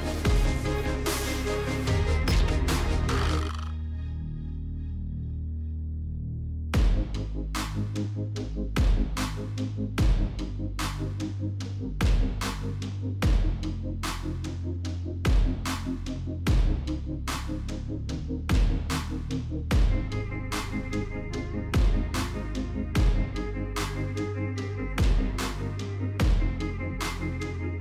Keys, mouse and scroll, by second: 0.4 click, 1.6 click, 2.4 typing, 3.0 click, 8.0 right click, 9.7 click, 10.2 click, 10.9 click, 11.3 right click, 12.3 click, 13.3 click, 14.3 click, 14.7 right click, 16.2 click, 17.8 click, 19.3 click, 20.8-22.2 typing, 23.0 click, 23.2 click, 25.3 click, 26.1-27.8 typing.